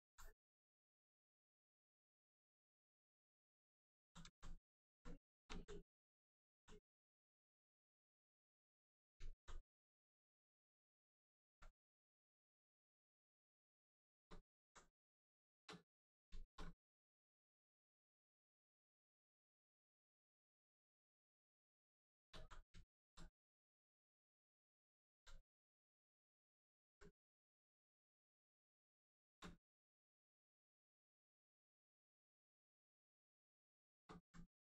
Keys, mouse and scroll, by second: 1.0 right click, 1.0 right click, 4.3 alt+right click, 4.7 alt+right click, 5.0 right click, 5.1 right click, 5.3 shift+right click, 5.6 alt+right click, 6.3 alt+click, 8.3 right click, 9.3 alt+right click, 10.0 right click, 10.1 right click, 12.0 click, 13.6 right click, 14.0 shift+right click, 14.4 alt+right click, 15.0 right click, 15.1 right click, 15.3 shift+right click, 15.8 alt+right click, 16.0 right click, 16.1 right click, 16.3 shift+right click, 16.8 ctrl+click, 19.2 click, 19.8 right click, 20.5 ctrl+click, 20.8 right click, 22.1 shift+right click, 22.4 alt+right click, 22.7 alt+right click, 23.5 right click, 23.6 right click, 24.9 alt+right click, 25.4 right click, 25.5 right click, 26.6 alt+right click, 27.3 right click, 27.4 right click, 29.2 shift+right click, 29.6 alt+right click, 32.3 right click, 33.8 shift+right click, 34.2 alt+right click.